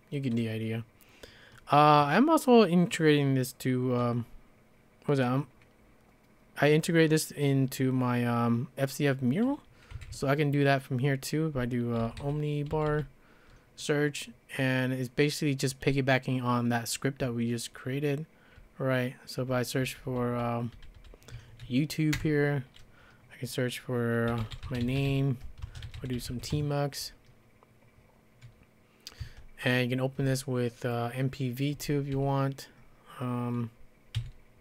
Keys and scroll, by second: 10.0 typing, 11.8-13.4 typing, 18.6 ctrl+n, 19.1-19.7 ctrl+n, 19.9 ctrl+n, 20.1 ctrl+n, 20.5 ctrl+n, 20.8 ctrl+n, 21.2 ctrl+n, 22.2 Return, 24.1-26.8 typing, 29.0-32.7 typing, 34.2 e.